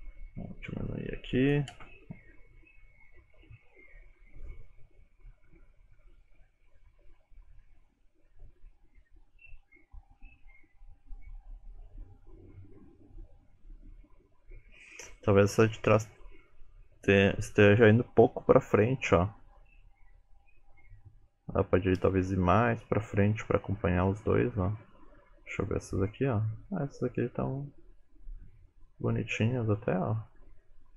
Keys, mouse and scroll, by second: 1.5 click, 1.8 space.